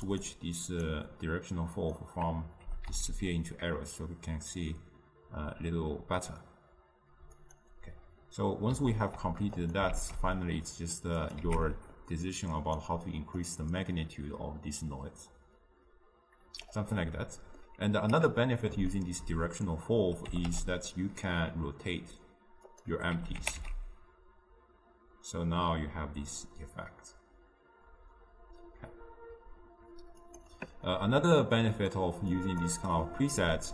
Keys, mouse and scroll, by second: 2.1 click, 3.0 g, 9.7 click, 10.0 shift+d, 11.5 x, 14.5-17.8 drag, 17.8-20.7 middle drag, 20.7 r, 23.5 g, 31.8-33.7 drag.